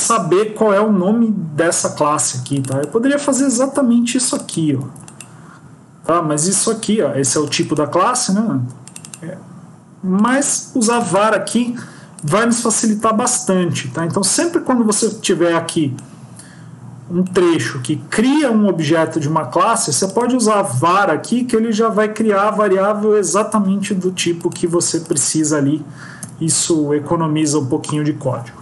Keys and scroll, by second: 3.6 ctrl+c, 4.7 ctrl+v, 12.9 ctrl+s, 26.3 Tab.